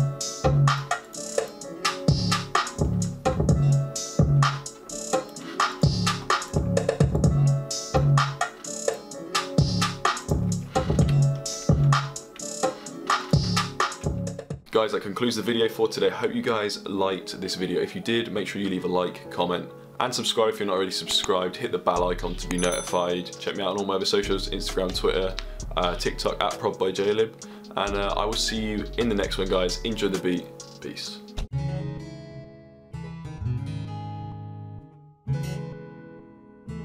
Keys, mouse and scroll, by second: 4.3 click, 9.4 click, 11.6 click, 12.1 F1, 12.5 F1.